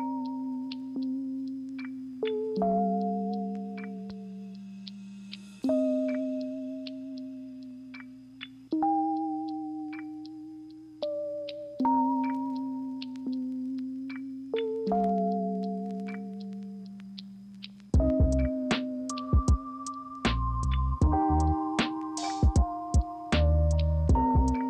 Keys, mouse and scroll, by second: 15.7 ctrl+z.